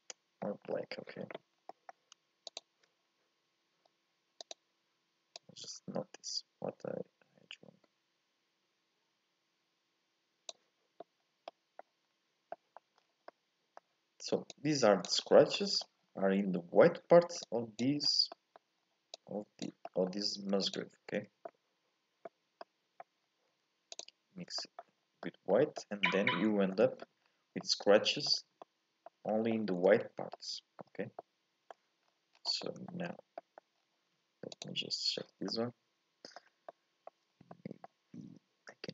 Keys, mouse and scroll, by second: 0.6-2.5 scroll down 1, 2.5 ctrl+shift+click, 3.1-3.4 scroll up 2, 3.4-4.1 scroll down 1, 5.4 click, 14.5 click, 17.5 click, 20.7 ctrl+shift+click, 24.0 ctrl+shift+click, 25.0 scroll up 1, 25.2-26.4 middle drag, 26.4 scroll up 1, 26.5 middle click, 27.2-27.5 scroll down 2, 27.5 scroll up 1, 27.6 middle click, 28.5 scroll up 1, 28.6 middle click, 29.2 scroll up 2, 29.5 shift+middle click, 29.9-30.4 scroll down 1, 30.4-34.6 middle drag, 34.6 ctrl+shift+click, 35.5 middle click, 36.4-36.7 scroll up 2, 36.7 middle click, 37.3 scroll down 2, 37.5-38.9 middle drag.